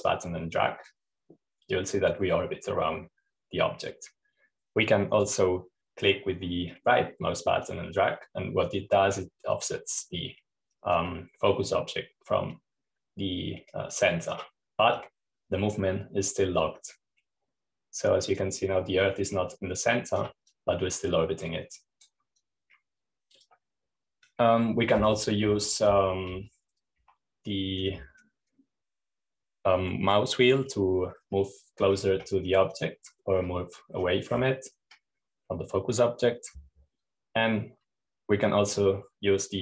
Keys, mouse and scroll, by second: 0.0-6.8 drag, 9.2 right click, 16.5-21.8 drag, 22.0-24.6 drag, 27.0 Down, 28.5 typing, 30.3-31.1 scroll up 1, 31.1-31.8 scroll down 1, 31.8-34.2 scroll down 1, 34.2-35.4 drag, 34.2-35.0 scroll up 1, 35.0-36.3 scroll down 1, 36.3-36.9 scroll up 1, 36.9-37.6 scroll down 1, 37.6-39.6 scroll down 1.